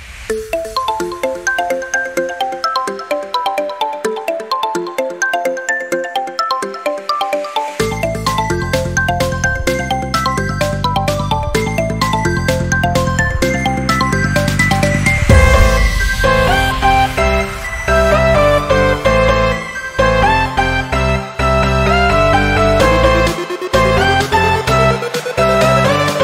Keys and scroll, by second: 5.0 ctrl+z, 6.7 ctrl+z, 8.5 ctrl+z, 10.3 ctrl+-, 12.3 ctrl+-, 15.3 ctrl+z.